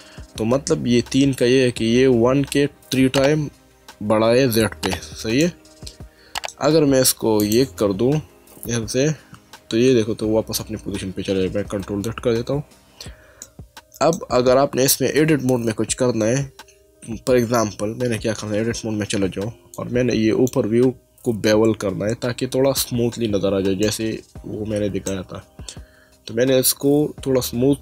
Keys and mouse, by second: 5.4 middle click, 7.4 click, 8.5 1, 11.4 ctrl+z, 13.4 middle click, 18.6 Tab, 19.7 click, 23.8 middle click.